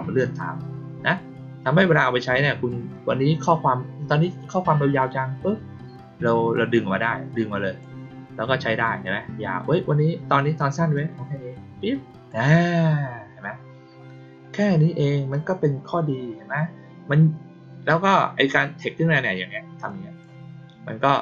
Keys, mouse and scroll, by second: 1.9-7.7 drag, 10.9-12.2 drag, 19.8 click, 21.0 click.